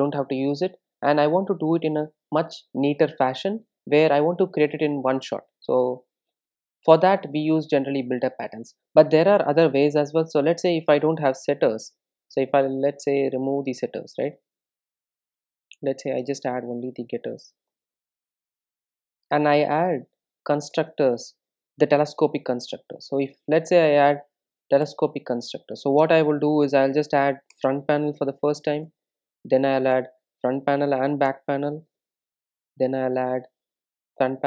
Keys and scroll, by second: 14.5 super+z, 16.6 super+n, 22.0 super+n, 28.2 super+n.